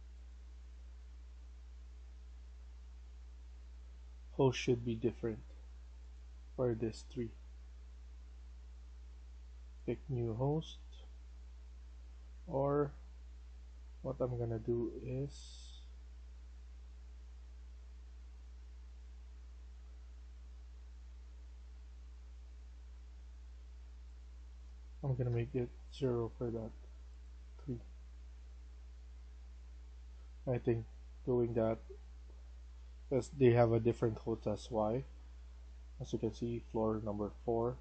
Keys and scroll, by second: 11.7 q, 24.9 typing, 25.1 Return, 27.7 Escape, 27.9 Escape.